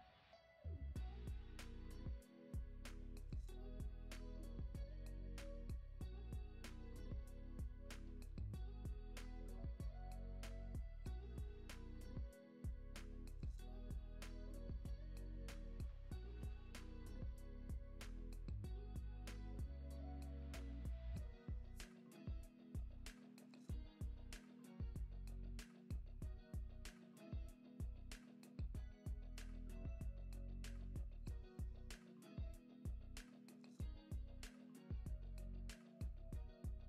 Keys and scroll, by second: 12.7 alt+w, 14.6 alt+w, 16.3 space, 21.6 space, 22.1 super+s, 23.0 space, 26.7 space, 28.6 super+s, 35.0 super+Up, 36.2 super+Down.